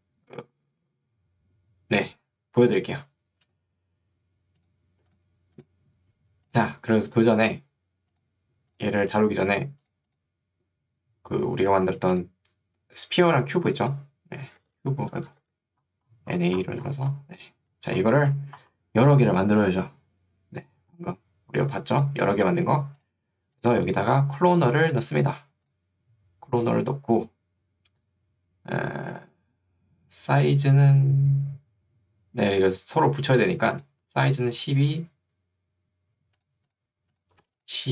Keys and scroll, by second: 14.7 b, 15.5 a, 34.3 2, 37.5 2.